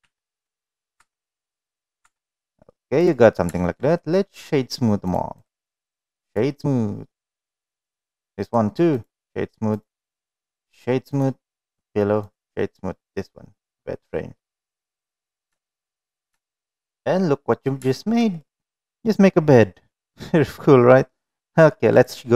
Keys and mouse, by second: 1.0 Tab, 1.1 middle click, 1.9 Tab, 2.1-2.6 middle drag, 2.8 click, 3.5 shift+middle drag, 3.8-4.1 middle drag, 5.4-7.3 right drag, 8.0 click, 8.4 right click, 9.6 click, 10.0 right click, 11.0 click, 11.7 right click, 13.0-14.3 middle drag, 14.8-15.2 middle drag, 15.5 shift+middle drag, 15.8-16.2 middle drag, 16.4 shift+middle drag, 16.8-17.6 middle drag, 17.9 shift+middle drag, 18.3-18.8 middle drag, 19.4-20.4 middle drag.